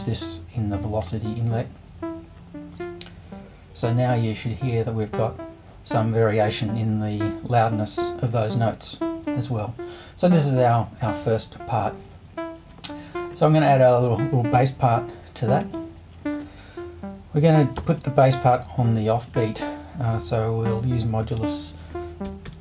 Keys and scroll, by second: 15.6 super+i, 17.8 shift+5, 19.1 space, 19.3 4, 21.4 super+i, 22.2-22.6 typing.